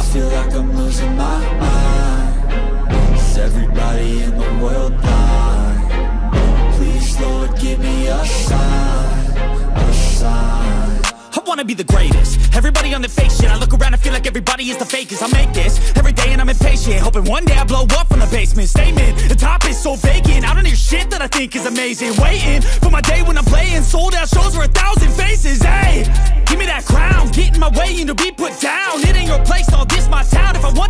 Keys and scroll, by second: 12.8 ], 13.0 ctrl+alt+z, 15.3 ctrl+alt+z, 16.6 ctrl+-, 18.2 ctrl+-, 18.9 ctrl+-, 19.2-20.9 typing, 22.3-25.8 typing, 28.4 ctrl+=, 28.8 space, 29.2 ctrl+=, 29.3 space, 29.6 ctrl+=, 29.8 space.